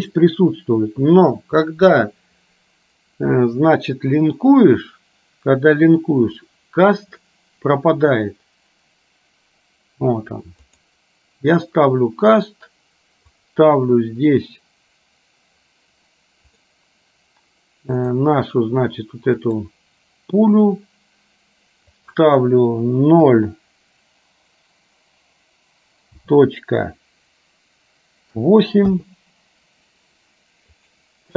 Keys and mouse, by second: 13.6-16.8 drag, 18.1 click, 22.1-29.1 drag.